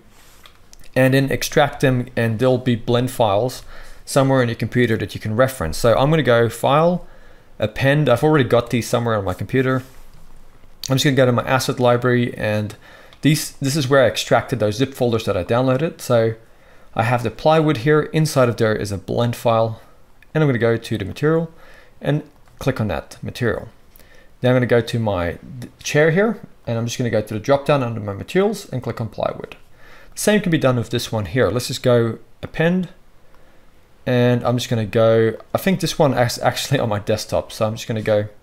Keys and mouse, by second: 1.6 z, 22.3 click, 22.3 middle click, 22.3-24.5 right drag, 24.5 middle click, 24.6-26.5 right drag, 26.5 middle click, 26.7-27.4 right drag, 27.4 middle click, 27.5-30.0 right drag, 30.0 middle drag, 30.1-31.5 right drag, 31.5-32.5 middle drag.